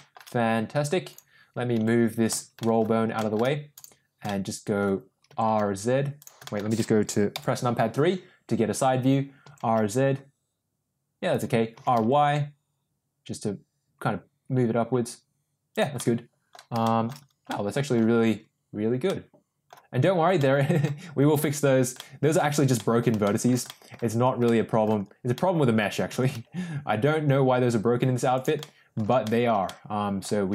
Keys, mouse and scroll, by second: 1.1 click, 1.7 g, 2.5 middle drag, 3.1 shift+middle click, 4.2-4.7 middle drag, 5.2 r, 6.3 middle click, 7.2 KP_3, 9.3 r, 11.6 r, 15.9-16.5 middle drag, 16.7 shift+middle drag, 17.5-17.9 middle drag, 19.1-19.6 middle drag, 20.3 scroll up 1, 20.4-20.8 middle drag, 22.0-22.3 middle drag, 22.7-23.0 middle drag, 23.2 shift+middle drag, 23.7 middle click, 24.4-24.8 middle drag, 25.2-25.7 middle drag, 26.0 r, 28.5-28.9 middle drag, 29.1 shift+middle drag, 29.6-30.2 middle drag, 30.4 r.